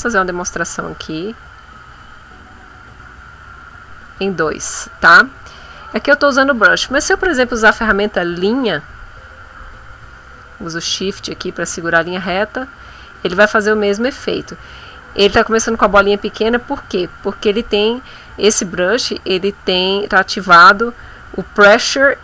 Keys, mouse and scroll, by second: 1.5-4.3 drag, 7.6 click, 8.8-12.2 drag.